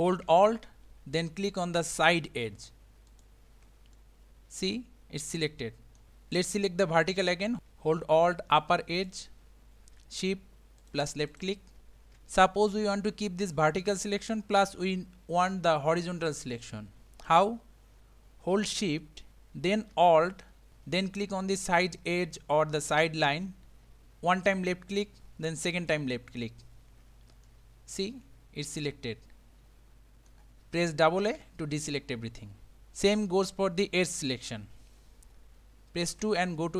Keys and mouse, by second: 3.2 alt+click, 4.0-6.0 middle drag, 10.8 shift+click, 11.3 shift+click, 27.5-30.3 middle drag, 31.2 a, 31.4 a, 36.1 2.